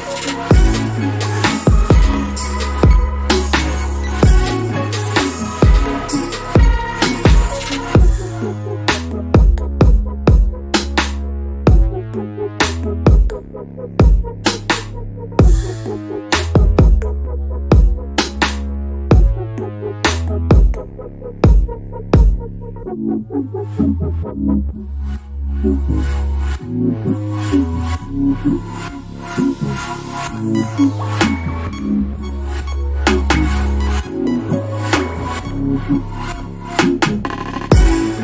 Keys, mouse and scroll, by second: 1.3 click, 2.0 scroll down 1, 3.7 click, 4.8 scroll down 1, 5.9 scroll up 1, 6.9 click, 8.5 scroll up 1, 9.2 alt+click, 10.2 alt+click, 12.1 click, 12.8-13.1 scroll down 1, 13.6 scroll up 1, 15.0 click, 15.7 scroll down 1, 16.4 scroll down 1, 17.0 scroll up 2, 17.5 click, 26.7 alt+scroll down 1, 27.8-28.8 scroll down 1, 28.8 click, 29.3 right click, 31.4 click, 33.0 l, 34.1 click, 36.6 click.